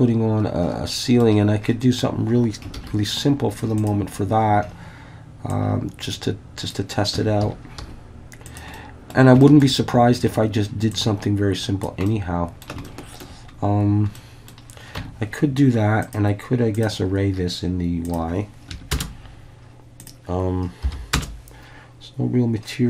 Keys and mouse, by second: 2.8 shift+a, 5.5-6.7 drag, 7.2 Tab, 7.4 a, 7.8 s, 8.5 click, 8.8 middle click, 9.4 shift+middle click, 10.9 click, 12.1 middle click, 12.9 shift+middle click, 14.2 middle click, 15.0 Tab, 16.0-16.9 drag, 18.0-19.7 drag, 20.0-21.4 drag.